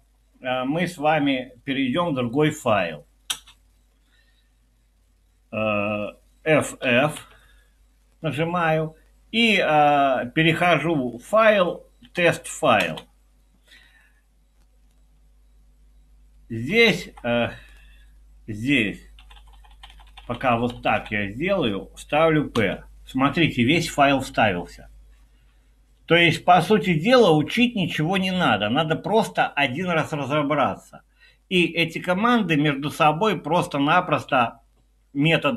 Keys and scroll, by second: 3.3 typing, 6.9 f, 7.2 f, 11.2 Down, 11.5 Down, 12.0 Down, 12.8 Return, 16.6 Up, 16.9 Up, 17.1 Up, 19.2 Down, 19.4 Down, 19.5 Down, 19.7 Down, 19.9 Down, 20.2 Down, 20.4 Down, 20.6 Down, 20.8 Down, 20.9 Down, 22.5 p.